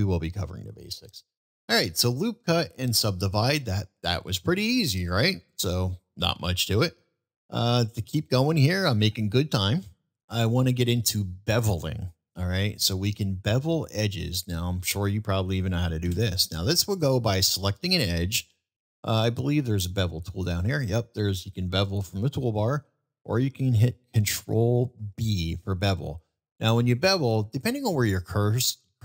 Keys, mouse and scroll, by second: 5.4-5.9 middle drag, 7.7-8.1 middle drag, 9.1-9.5 middle drag, 11.1-12.8 middle drag, 13.7-14.5 middle drag, 16.9 click.